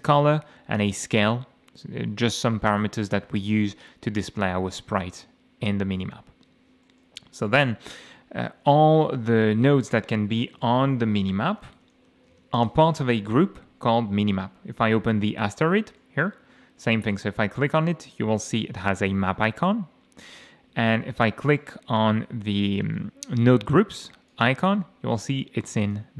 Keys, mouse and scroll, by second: 0.2 click, 6.8 middle click, 10.6 ctrl+shift+o, 11.1-12.8 typing, 15.6-16.0 scroll up 2, 16.0 middle click, 17.1 click, 19.0 click, 24.3 click, 25.8 click.